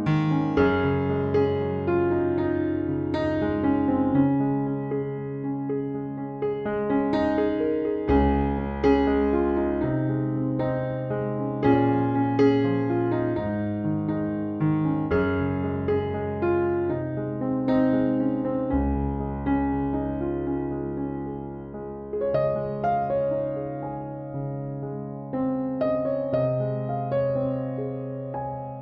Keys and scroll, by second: 10.3 ctrl+z.